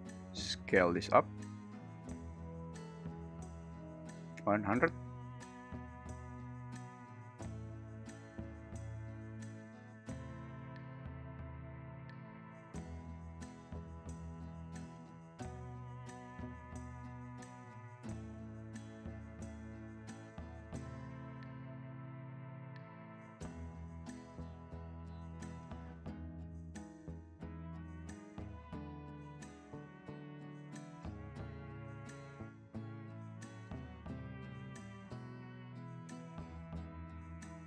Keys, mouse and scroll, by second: 1.3 click, 3.7-4.8 drag, 4.0 0, 4.2 0, 5.3-13.2 typing, 6.1 alt+g, 8.4 Escape, 8.5 click, 9.2 alt+g, 10.2 Escape, 11.4 click, 15.3-16.2 typing, 16.8 super+`, 17.6 `, 17.6 r, 17.7 Escape, 17.8 g, 18.5 `, 20.0-27.1 typing, 22.3 click, 24.3 alt+Escape, 25.9 click, 27.4 Escape, 28.1 super+click, 28.3 Escape, 28.4 x, 28.8 r, 29.1 s, 29.1 x, 30.0 click, 30.1 0.